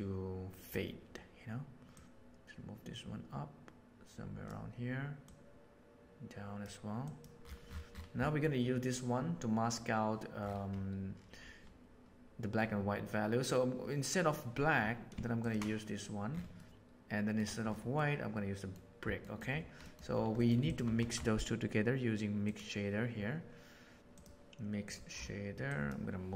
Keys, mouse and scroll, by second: 1.9-4.5 drag, 5.2 click, 7.0 click, 8.2 middle click, 15.4 ctrl+shift+click, 16.5 middle click, 18.0 middle click, 19.2 middle click, 19.8 middle drag, 20.6 click, 20.9 shift+a, 25.8 drag.